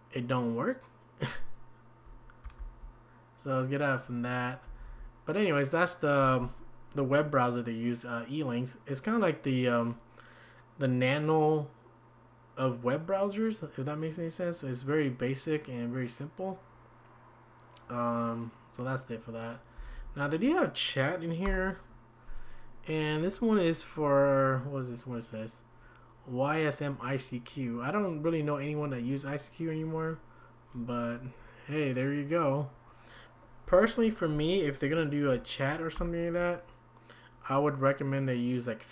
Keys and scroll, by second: 2.4 ctrl+c, 4.6 Down, 4.8 Down, 19.8 Down, 35.9 Return.